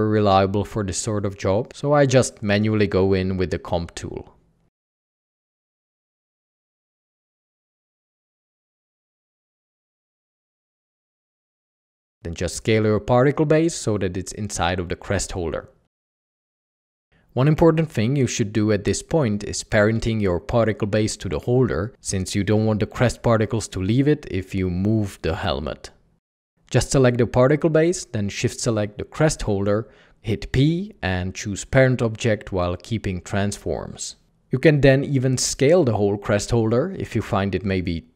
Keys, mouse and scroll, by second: 10.8 ctrl+Tab, 13.2-14.9 typing, 16.1 alt+a, 27.4 alt+a, 28.8 ctrl+p, 36.7 ctrl+p.